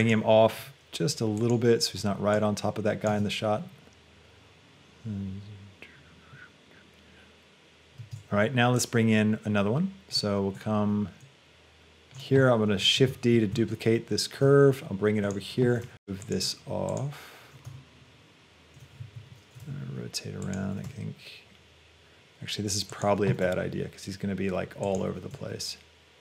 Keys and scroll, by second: 3.1 space, 8.3 space, 13.1 shift+d, 13.4 Escape, 14.5 g, 15.9 Tab, 19.0 Escape, 19.8 r, 20.9 g, 23.4 r.